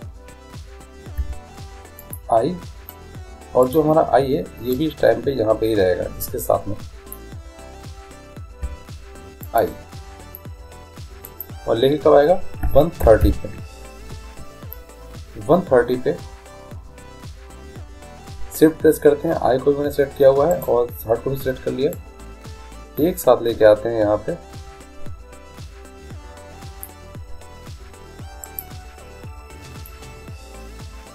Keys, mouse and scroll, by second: 1.3 i, 3.7-5.5 right drag, 4.8-6.6 drag, 8.7 i, 11.3-13.3 drag, 20.6-22.4 right drag, 22.0-23.8 drag, 30.0-31.1 drag, 30.0 right click.